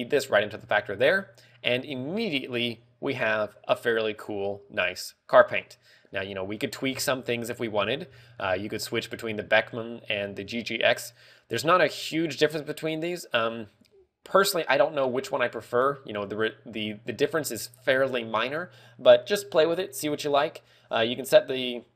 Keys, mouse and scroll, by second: 7.8 scroll down 3, 8.9 scroll up 4.